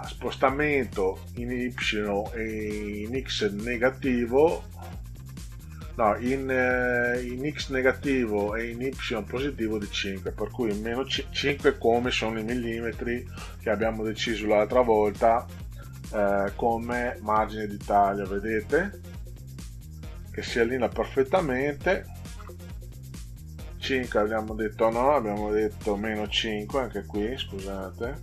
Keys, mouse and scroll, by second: 13.5 -, 15.1 5, 17.3 Return, 19.7 click, 21.8 5, 22.3 Return, 27.4 click.